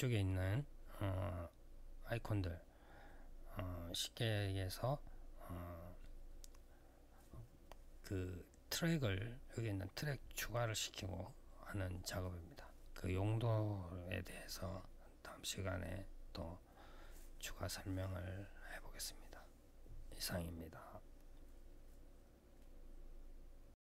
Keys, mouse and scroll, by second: 23.7 click.